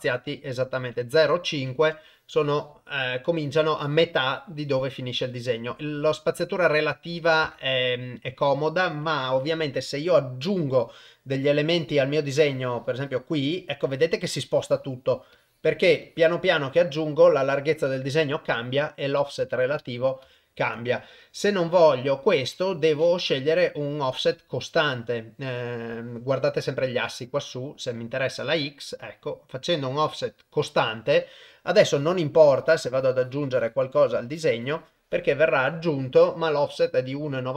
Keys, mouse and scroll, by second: 0.7-1.8 drag, 7.1 click, 12.4 click, 14.5 click, 15.3 click, 16.0 click, 19.2 ctrl+z, 24.5 click, 28.1-30.8 drag, 31.9 click, 32.5 click, 32.9 click, 33.2 click, 33.8 click, 34.6 click.